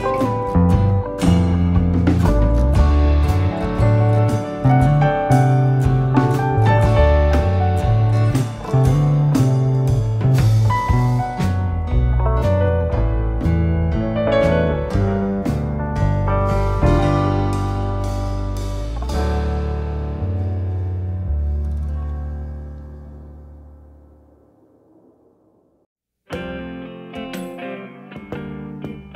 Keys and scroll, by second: 5.7 Escape, 6.6 d, 12.5 Escape, 13.8 1, 14.0 2, 14.4 Return, 15.5 Escape, 21.2 9, 21.9 BackSpace, 22.0 -, 23.6 1.